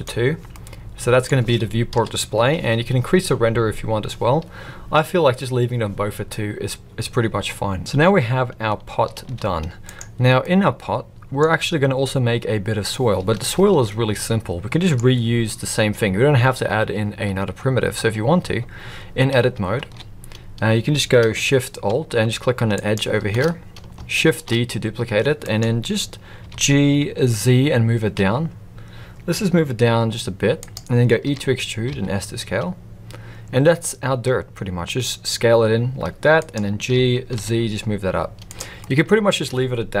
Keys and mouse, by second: 0.5-1.2 middle drag, 1.9 KP_1, 9.1 alt+a, 10.4-11.4 middle drag, 14.1-14.9 middle drag, 18.4 Tab, 19.7 alt+a, 22.7 alt+shift+click, 24.3 shift+d, 26.4 g, 31.2 e, 36.8 g, 38.8-40.0 middle drag.